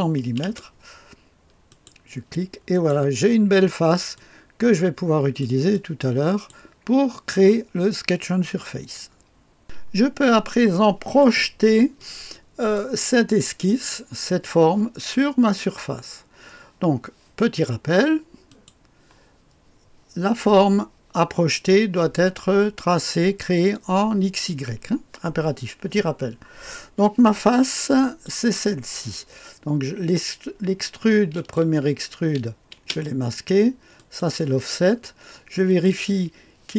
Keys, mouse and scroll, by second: 0.2 KP_0, 0.4 KP_0, 1.7 click, 2.7 click, 3.2-3.6 scroll down 1, 4.1 click, 5.1-6.9 drag, 9.6 click, 10.1-11.2 scroll up 2, 10.7 right click, 11.9 click, 18.4 click, 18.8 click, 27.6 click, 31.3 click, 32.2-32.7 typing, 33.9 click, 35.6 click.